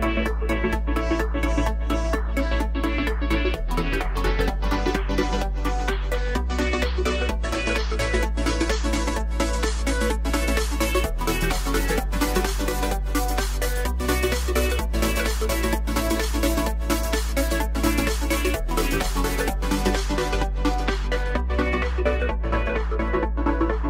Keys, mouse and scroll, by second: 0.0 KP_3, 0.4 KP_1, 1.0-1.4 scroll up 3, 1.4-4.6 shift+middle drag, 4.6 shift+a, 5.1-6.1 scroll down 2, 6.1-7.7 drag, 7.7-8.1 scroll up 3, 8.5 s, 10.0 s, 12.1 shift+d, 13.3 r, 15.9-17.2 drag, 17.6-18.2 middle drag, 18.2-19.1 scroll up 2, 19.1 Tab, 19.7 click, 21.3 click, 22.8 click.